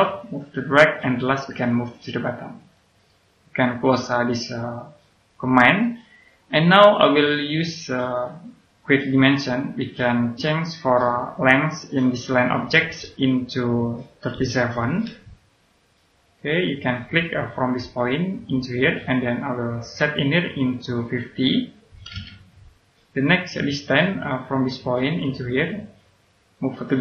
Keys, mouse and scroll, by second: 5.5 middle click, 7.9 click, 14.3 KP_3, 16.5 click, 21.8 KP_5, 22.0 KP_0, 23.4 click.